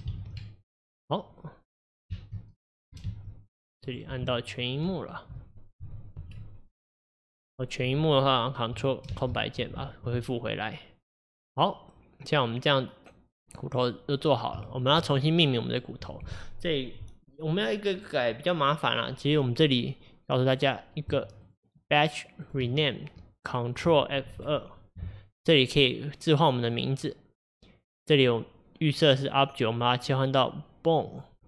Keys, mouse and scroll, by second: 9.1 ctrl+space, 14.7-20.7 shift+middle drag, 20.7 click, 22.5 shift+click.